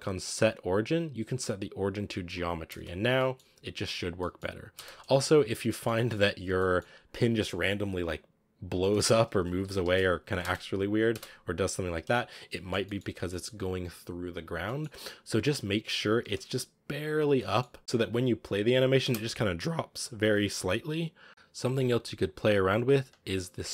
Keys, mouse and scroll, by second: 2.6 space, 3.0-4.6 middle drag, 4.6 space, 5.0 click, 5.5-6.3 shift+middle drag, 6.3 scroll down 1, 6.5-8.4 middle drag, 8.4-8.8 scroll up 1, 8.8-9.6 middle drag, 9.6 g, 10.3 space, 11.8 click, 12.4-14.2 middle drag, 14.2 scroll down 1, 14.5 middle drag, 14.7 scroll up 3, 15.5-16.0 middle drag, 16.0 g, 17.3-17.8 middle drag, 17.8 space, 18.3 click, 18.9 space, 21.3 scroll down 9.